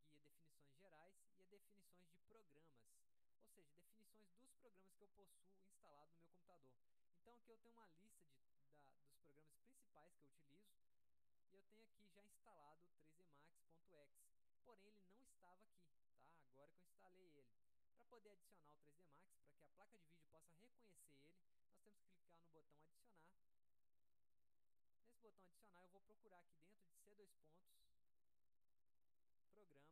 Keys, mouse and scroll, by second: 2.7 click, 6.6 click, 11.8 click, 23.2 click, 24.7-25.6 drag, 27.0 click, 29.5 click.